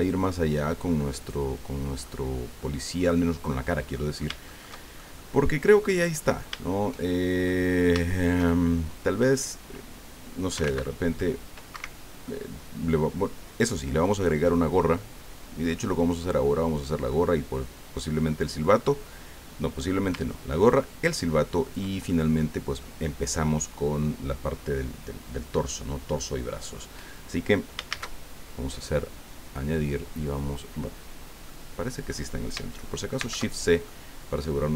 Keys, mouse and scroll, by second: 0.0 click, 0.7 click, 1.2 click, 2.0-3.2 middle drag, 3.2 scroll down 2, 3.5 click, 4.2-7.6 shift+drag, 7.9 shift+click, 10.5 s, 10.6 x, 11.7 Escape, 12.3-14.2 drag, 14.3 scroll down 1, 14.5-16.8 drag, 16.8 scroll down 1, 17.1-18.8 drag, 20.7-21.9 ctrl+drag, 22.1 ctrl+middle click, 27.9 shift+a, 31.5 click, 33.2 shift+c, 33.9 click.